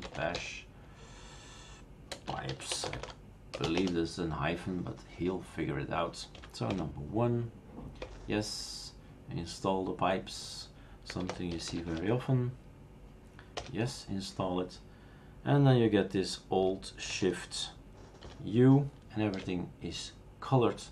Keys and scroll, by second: 0.0-3.6 typing, 3.8 Return, 6.4 1, 8.1 Return, 10.9-12.2 typing, 13.6 Return, 18.3 alt+shift+u.